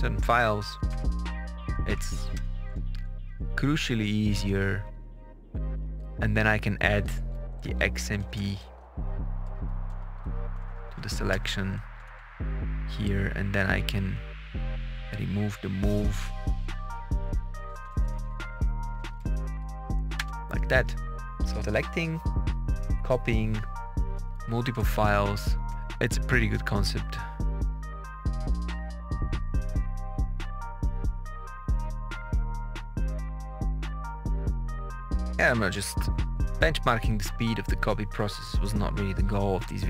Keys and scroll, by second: 0.0-0.8 typing, 2.2 Return, 4.4 Down, 6.8 KP_Add, 7.5 Right, 7.9 BackSpace, 9.5-10.6 typing, 11.2 Return, 11.8 Up, 12.2 Down, 13.8 Up, 17.1 Right, 17.4 BackSpace, 18.5-19.6 typing, 20.1 Return, 24.6 Page_Up, 24.9 Down, 25.0 Return, 25.6 Down, 25.6 Return.